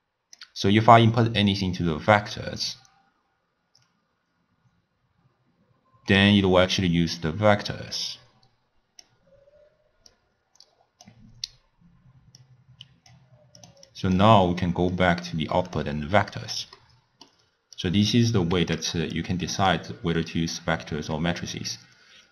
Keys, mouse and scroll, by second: 6.2 click, 10.1 drag, 12.4 click, 13.7 click, 13.9-15.1 drag, 16.8-17.8 middle drag, 17.8 click, 18.9 x, 19.2 click, 20.0-21.9 middle drag, 21.9 click.